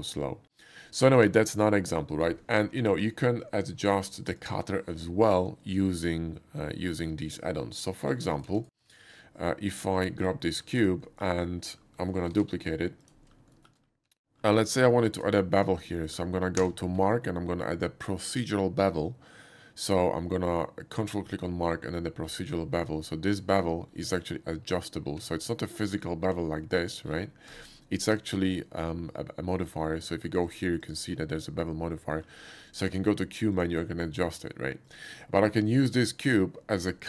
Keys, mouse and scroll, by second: 3.0 click, 3.8 x, 8.3 click, 8.5 x, 8.9 shift+a, 9.9 click, 10.5 middle click, 11.0 shift+middle click, 11.9 shift+middle click, 12.3 shift+d, 13.0 click, 13.2 middle click, 13.5 shift+middle click, 14.0 Tab, 14.7 middle click, 15.0 shift+middle click, 15.6 shift+click, 15.9 shift+middle click, 16.6 q, 17.1 ctrl+q, 21.0 ctrl+click, 22.2 ctrl+middle click, 23.3 ctrl+click, 24.0 ctrl+middle click, 25.2 Tab, 26.3 ctrl+b, 27.1 middle click, 27.5 right click, 28.1 Tab, 28.6 middle click, 29.5 middle click, 30.4 click, 30.8 click, 32.1 middle click, 32.7 click, 33.1 q, 33.5 click, 34.9 click, 35.4 middle click.